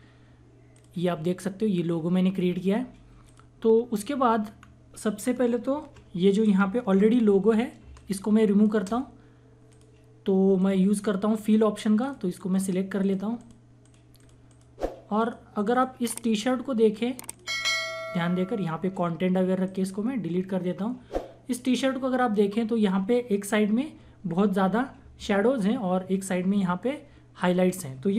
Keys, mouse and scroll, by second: 3.2 click, 4.6-5.2 scroll down 1, 6.1-6.9 scroll up 1, 7.8 space, 7.9 click, 8.4 space, 9.7 click, 16.1 right click, 17.3 click, 20.1 click.